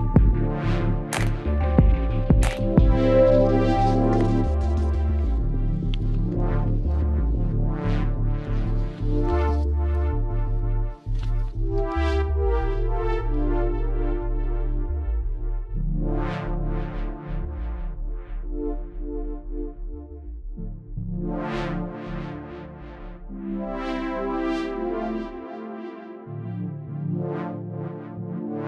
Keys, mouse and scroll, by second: 0.0 g, 2.2 ctrl+r, 3.1 right click, 3.4 g, 5.2 ctrl+Tab, 6.8-8.7 right drag, 7.1 c, 16.2-18.0 right drag, 17.1 z, 18.1 z, 18.4-20.1 middle drag, 19.2 e, 20.3 z, 21.2-23.1 drag, 22.3 x, 23.7 KP_3, 24.8 Tab, 26.3 z.